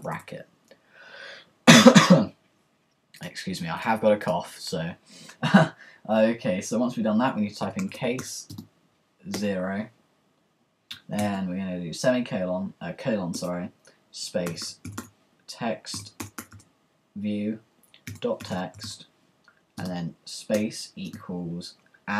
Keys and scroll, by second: 7.4-9.3 typing, 11.0-11.8 typing, 13.4 Return, 14.2-17.0 typing, 18.2-19.3 typing, 20.5-22.1 typing.